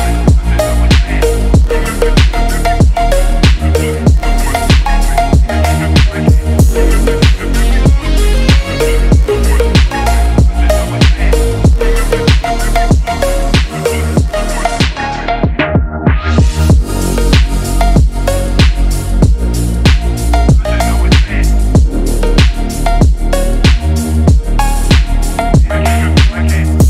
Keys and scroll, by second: 0.3 ctrl+z, 25.6 ctrl+z.